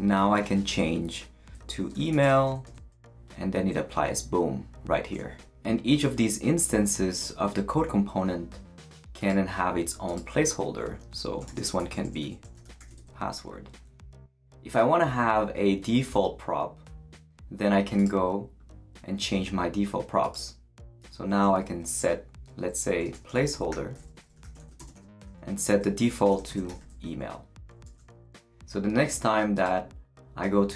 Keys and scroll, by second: 1.9-2.8 typing, 11.2-13.3 typing, 21.0 Return, 22.9-27.2 typing, 27.7 super+l, 27.8 super+s.